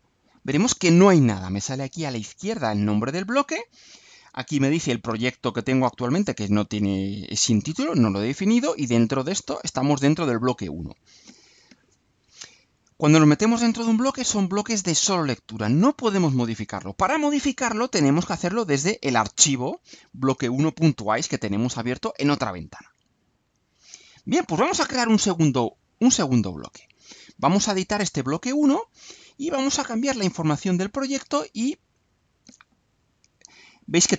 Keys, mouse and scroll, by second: 18.2 click, 22.8 click, 23.8 click, 25.8 click, 30.0 click, 33.1 click.